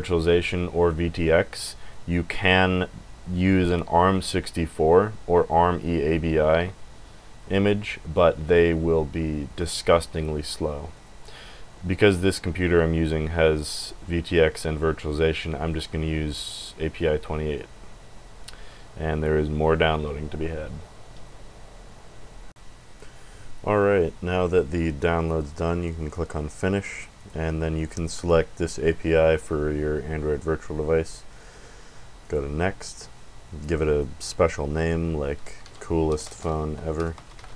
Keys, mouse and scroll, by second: 1.8 click, 2.5 click, 4.1 click, 8.0 click, 10.9 click, 16.9 click, 22.5 click, 25.2 click, 27.1 click, 27.7 click, 32.2 click, 33.6 click, 36.3-37.5 typing.